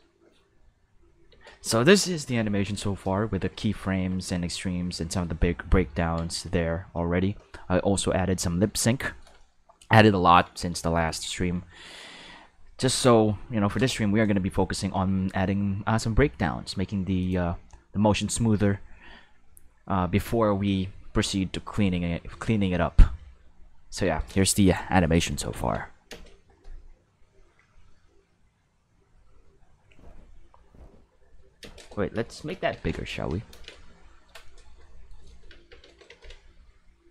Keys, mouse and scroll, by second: 1.3 space, 4.2-5.2 ctrl+middle drag, 5.8 ctrl+s, 8.9 shift+middle click, 9.9 ctrl+middle click, 10.9 shift+middle click, 17.2 click, 23.2 space, 24.0 space, 25.5 ctrl+s, 26.1 space, 31.6 space, 32.7 ctrl+s, 33.5 ctrl+space, 34.4-35.1 shift+middle drag, 36.1 ctrl+s.